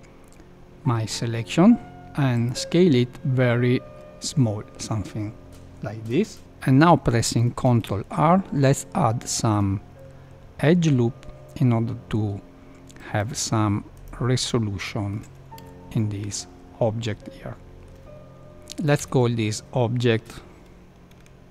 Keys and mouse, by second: 7.6 ctrl+r, 14.4 middle click, 15.5 a, 15.9-17.8 middle drag, 18.1 F2.